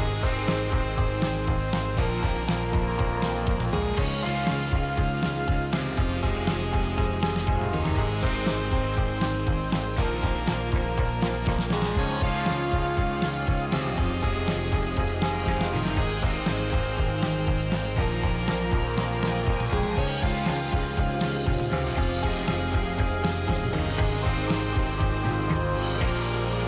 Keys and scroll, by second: 1.3 x, 3.0 z, 6.0 c, 7.6 q, 12.6 z, 16.2 2, 17.1 a, 18.1 m, 20.0 z, 22.8 2, 23.4 space, 25.1 3.